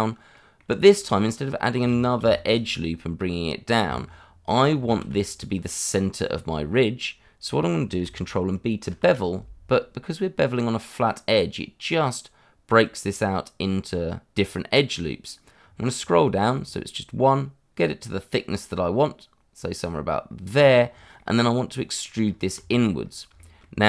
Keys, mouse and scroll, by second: 0.3 middle click, 0.9 shift+middle click, 1.1-1.8 scroll up 1, 2.2 ctrl+r, 2.5 click, 3.8 Escape, 4.9 ctrl+z, 6.0 middle click, 8.9 ctrl+b, 15.6 scroll down 1, 20.5 click, 20.8-21.1 scroll down 1, 21.1 middle click, 22.2 scroll up 1, 22.7 shift+middle click, 22.9-23.3 scroll up 1, 23.3 shift+middle click.